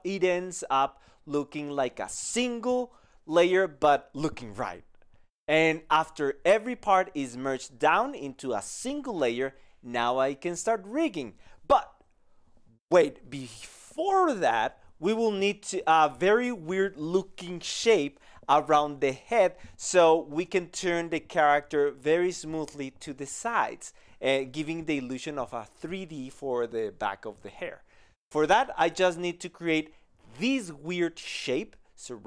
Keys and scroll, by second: 0.3 ctrl+space, 5.7 ctrl+e, 6.5 ctrl+e, 7.1 ctrl+e, 8.9 ctrl+space, 9.8 ctrl+e, 10.3 ctrl+e.